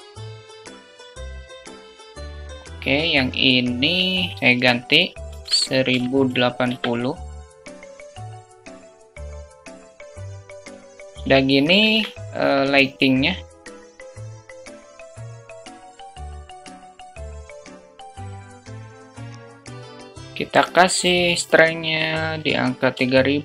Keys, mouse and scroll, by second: 2.5 q, 7.4 q, 8.1 alt+shift+click, 8.4 alt+click, 8.7 click, 9.7 q, 11.6 shift+a, 15.4 ctrl+z, 15.9 click, 16.5 click, 17.2 ctrl+z, 17.2 click, 17.5 middle click, 18.4 shift+t, 19.1 KP_0, 23.2 0.